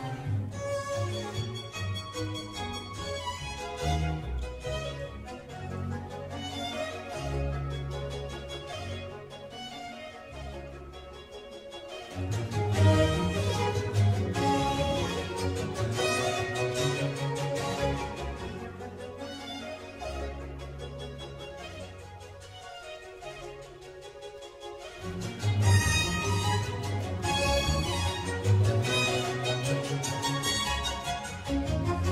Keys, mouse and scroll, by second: 1.1 click, 2.7-4.7 middle drag, 4.7 click, 5.0 middle click, 5.9 g, 10.1 middle click, 10.9 s, 13.8-15.5 middle drag, 15.5 s, 16.3-18.7 middle drag, 18.7 click, 20.0 g, 22.0-23.6 middle drag, 23.6 click, 29.9-31.1 drag, 31.3 click, 31.8-32.1 middle drag.